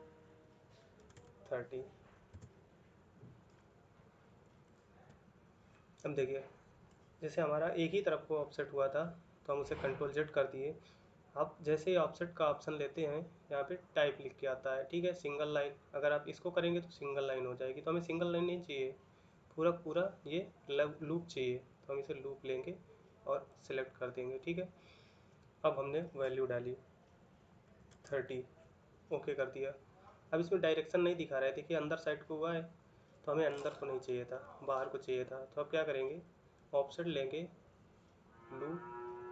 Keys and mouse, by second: 1.6 typing, 2.1 Return, 28.3 typing.